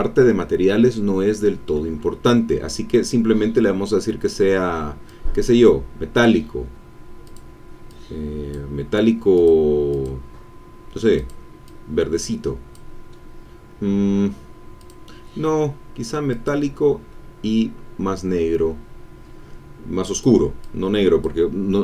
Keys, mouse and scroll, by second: 5.0-6.4 drag, 7.2 click, 7.9 click, 9.3 click, 9.9 click, 11.2 click, 11.6-12.9 drag, 14.7 click, 16.3 click, 16.7-17.3 scroll down 1, 17.6-18.1 scroll down 1, 20.1 click, 20.6 click.